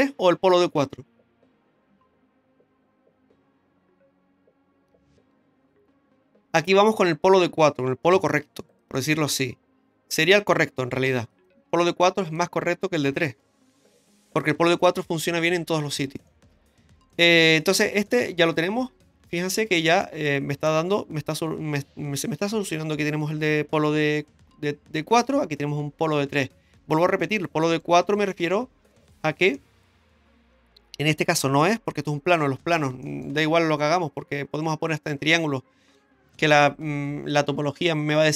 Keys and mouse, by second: 8.1 m, 11.1 2, 11.3 right click, 12.2 shift+right click, 13.0 x, 16.3 middle click, 17.8 middle click, 19.7 Tab, 20.0-20.7 middle drag, 26.8 Tab, 27.2 middle click, 28.5 shift+middle click, 29.5 middle click, 33.0 middle click.